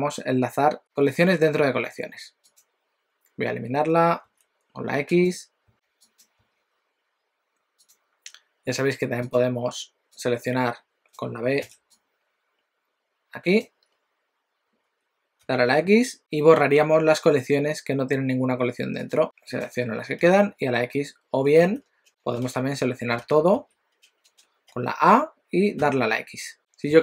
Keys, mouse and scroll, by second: 2.5 click, 4.3 x, 5.2 click, 5.8 x, 6.2 click, 6.5 x, 7.8 click, 9.2 click, 11.7 b, 19.0 click, 19.2 b, 20.2 x, 21.6 ctrl+z, 23.3 ctrl+z, 23.6 ctrl+z, 24.7 a, 25.9 x.